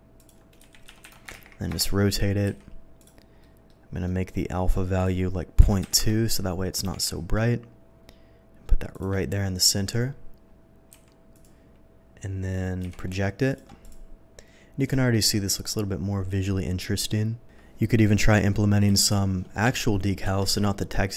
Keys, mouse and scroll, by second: 0.0-1.3 typing, 0.2 click, 1.7 Return, 2.6 s, 3.0 click, 3.4 middle click, 4.0 middle click, 5.0 click, 5.8 2, 5.9 Return, 6.8 g, 7.0 click, 8.9 click, 10.9 s, 11.3 click, 12.8 v, 13.5 click, 13.8 click, 15.0 shift+middle click, 18.3 click, 18.9 v, 19.6 Escape, 20.2 v.